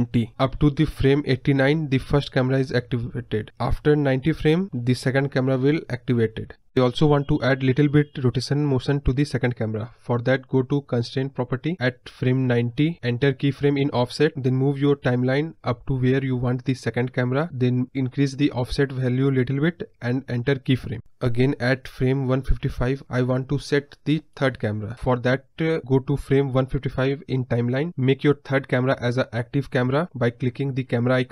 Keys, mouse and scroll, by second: 11.8-12.3 drag, 13.2-18.1 drag, 19.5-22.0 drag, 22.0 space, 23.6 space, 24.2 click, 25.3 Left, 29.7 click.